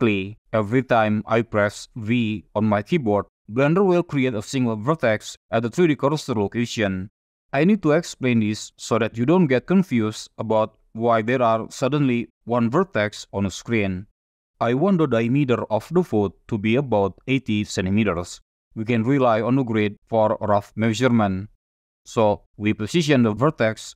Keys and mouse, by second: 11.2 v, 14.2 click, 22.2-23.0 drag.